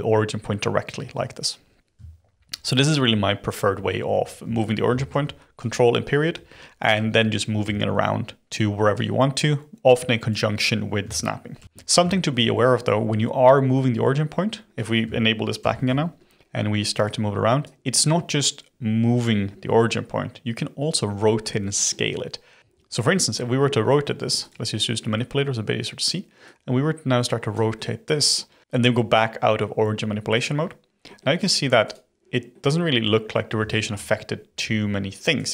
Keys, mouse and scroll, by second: 2.3 ctrl+., 2.9 ctrl+., 3.7 ctrl+., 4.1 ctrl+., 5.1 ctrl+., 5.5 ctrl+., 6.3 ctrl+., 6.9 ctrl+., 8.9 click, 11.5 ctrl+., 12.1-13.6 shift+middle drag, 13.6-14.6 scroll down 1, 15.5 ctrl+., 17.0 click, 21.4-22.6 middle drag, 24.4 click, 25.1-26.4 middle drag, 26.4 click, 27.7-28.4 middle drag, 30.3 click, 31.0-31.3 middle drag, 31.3 click, 31.8 click, 32.5-34.5 middle drag, 34.5 g.